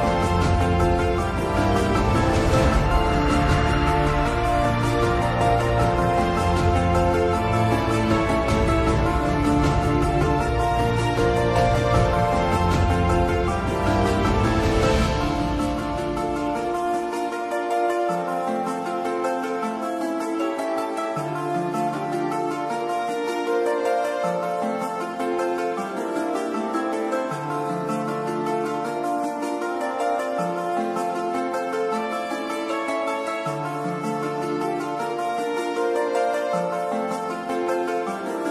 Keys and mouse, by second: 0.9 middle click, 2.1 click, 6.8 KP_1, 9.0 Tab, 9.5-14.4 middle drag, 14.4 Tab, 22.7 middle click, 23.5 Tab, 24.0-26.1 middle drag, 27.1-29.0 middle drag, 29.9-31.0 middle drag, 34.8-35.8 drag, 37.9-38.5 drag.